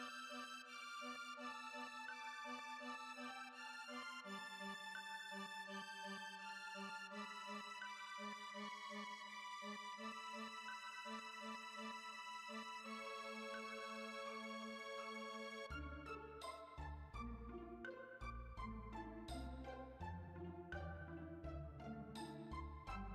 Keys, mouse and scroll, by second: 2.3 space, 2.4-7.4 drag, 7.8-8.3 scroll down 1, 8.3 x, 9.2 ctrl+right click, 9.5 ctrl+z, 10.2-11.2 drag, 11.3-14.3 drag, 14.3 KP_3, 16.4 g, 17.6 r, 19.8 g, 21.0 s, 22.4 ctrl+z.